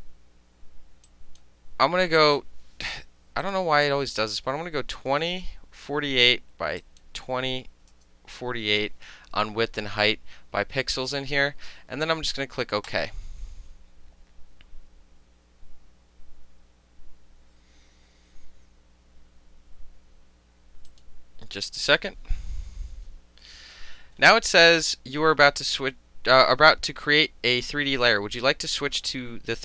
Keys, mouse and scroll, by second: 1.1 click, 2.2 click, 3.5 click, 3.9 click, 5.2 KP_1, 5.4 KP_0, 5.9 KP_4, 6.2 KP_8, 6.8 click, 7.8 KP_2, 8.0 KP_0, 8.4 KP_4, 12.9 click, 20.9 click.